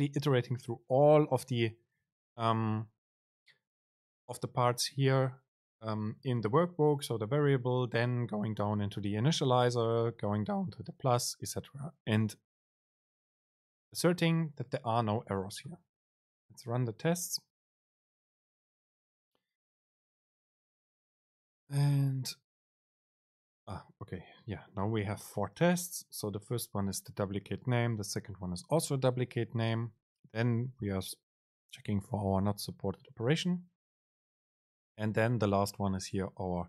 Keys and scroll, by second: 17.1 super+r.